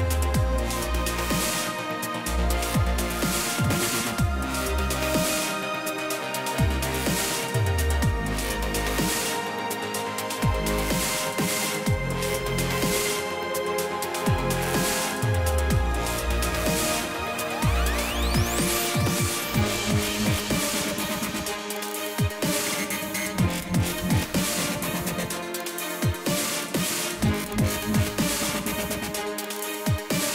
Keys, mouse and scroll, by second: 0.0 click, 2.6 click, 3.1 F1, 4.9 click, 7.0 click, 8.0 ctrl+shift+c, 8.8 F2, 10.4 click, 11.6 click, 12.2 click, 12.6 Delete, 13.8 click, 15.7 click, 16.1 click, 17.2 click, 18.5 click, 19.2 click, 20.7 click, 23.2 click, 26.4 click, 26.7 click, 27.1 click, 28.4 click.